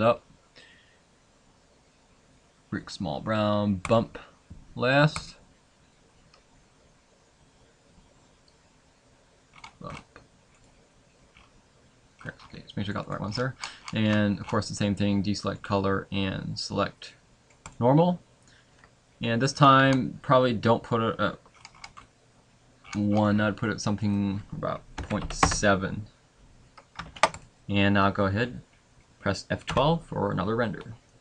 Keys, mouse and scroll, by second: 27.1 ctrl+s.